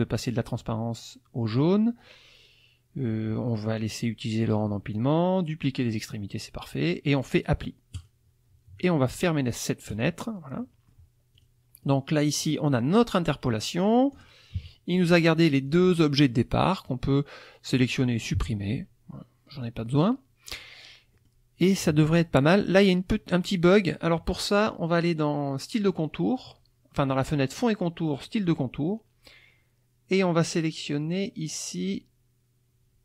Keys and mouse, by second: 7.9 click, 9.9 click, 10.6 middle click, 11.3 click, 11.8 click, 12.4-14.3 drag, 14.6 KP_Subtract, 15.7-17.1 drag, 18.3 Delete, 19.6-20.7 drag, 21.1 middle click, 21.8 click, 28.3 click.